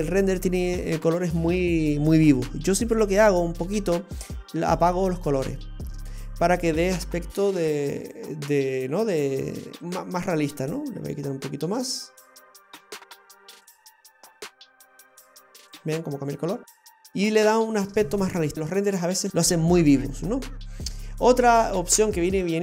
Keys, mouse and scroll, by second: 3.4-4.3 scroll up 3, 4.3 click, 6.6-7.4 scroll down 5, 7.4 click, 9.8-10.3 scroll up 2, 10.3 click, 16.7 scroll down 2, 19.7-21.0 scroll down 3, 21.0 click, 22.5 click.